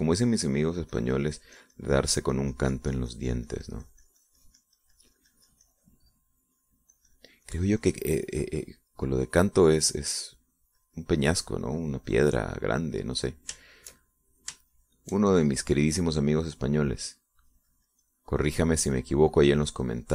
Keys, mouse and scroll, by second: 0.5 middle click, 1.3 middle click, 2.3-9.9 drag, 11.2-14.9 drag, 15.2 shift+middle click, 16.3 shift+middle click, 18.5-20.1 drag.